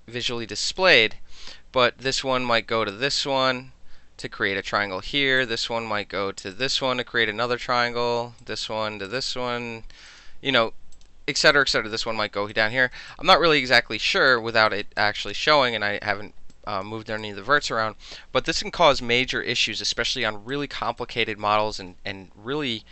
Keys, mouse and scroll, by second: 0.6 alt+click, 2.1 click, 2.9 click, 5.4 click, 6.6 click, 8.4 click, 9.1 click, 10.1 click, 11.0 click, 11.6 click, 12.5 click, 13.1 alt+click, 14.0 alt+middle click, 14.3 alt+click, 14.5 alt+middle click, 14.7 alt+right click, 14.8 alt+middle click, 15.0 alt+click, 15.3 alt+middle click, 16.5 alt+click, 17.2 alt+click, 20.8 alt+middle click, 21.0 alt+click, 21.3-21.6 alt+middle drag, 21.8-22.9 alt+middle drag.